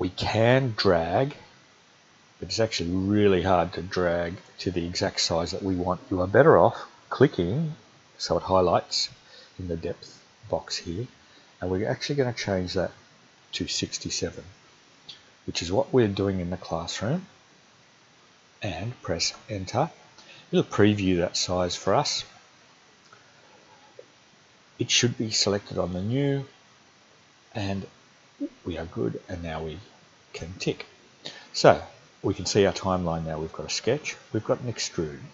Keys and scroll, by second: 13.3-13.7 typing, 19.3 Return.